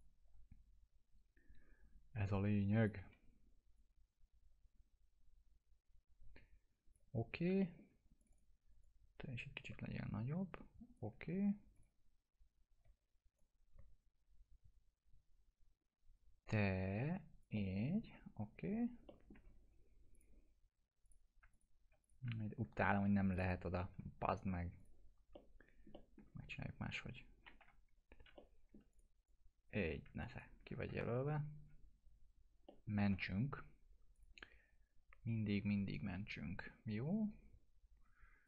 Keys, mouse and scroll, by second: 2.8-3.6 typing, 3.8-7.2 drag, 7.6 alt+middle click, 8.2-11.0 drag, 11.8-12.8 typing, 13.4-17.5 drag, 17.6-18.2 alt+middle click, 18.4 scroll up 1, 19.1 alt+middle click, 20.2 click, 21.6 shift+click, 22.0 click, 23.4 click, 24.8 click, 25.4-26.3 alt+middle click, 27.6 alt+F3, 28.4-29.2 alt+middle click, 28.9-29.9 click, 30.9 F3, 32.7 middle click, 33.0 ctrl+s, 34.2 click.